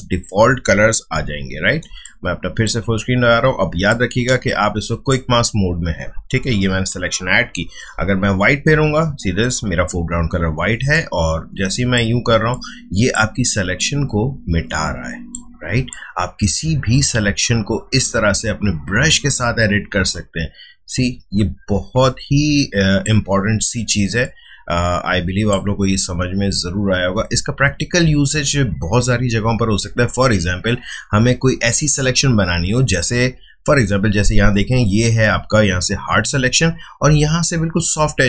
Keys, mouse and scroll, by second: 1.1 f, 1.8 space, 2.0 click, 2.3 space, 3.8-7.5 drag, 7.9 x, 10.9-28.1 drag, 34.6 space.